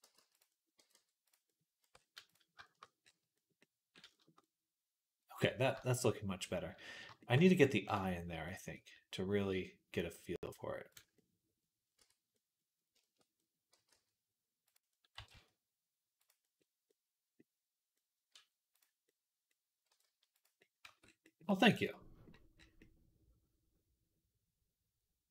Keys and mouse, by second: 0.6 g, 1.6 Tab, 2.4-7.9 shift+drag, 11.1 middle click, 11.8 Tab, 12.1-16.3 drag, 13.6 g, 15.0 r, 16.3-17.8 middle drag, 17.8-19.1 drag, 18.2 r, 19.4 click, 19.5-21.1 middle drag, 19.7 r, 20.7 Tab, 21.8 click, 22.4 click, 24.0 click, 25.1 click.